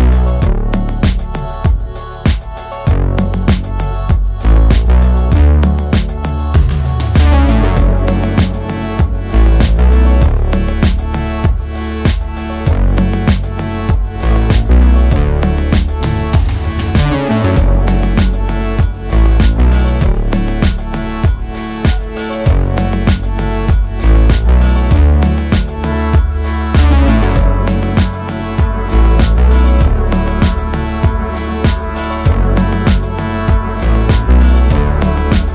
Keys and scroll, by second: 15.0 Tab, 16.5 a, 26.8 Tab, 33.9 a.